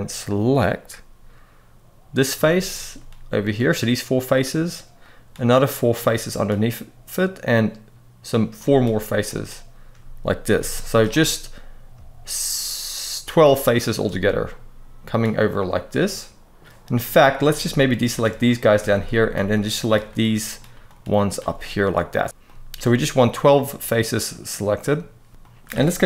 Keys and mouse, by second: 2.3 shift+click, 3.1 shift+click, 4.9 shift+click, 5.7 shift+click, 7.3 shift+click, 9.0 shift+click, 10.2 c, 10.8 right click, 14.2 middle click, 15.2-16.5 middle drag, 16.7 middle click, 17.8 alt+shift+click, 18.6 shift+middle click, 19.2 middle click, 20.6 shift+click, 21.0 shift+click, 21.3-24.2 middle drag, 25.3 middle click, 25.9 KP_3.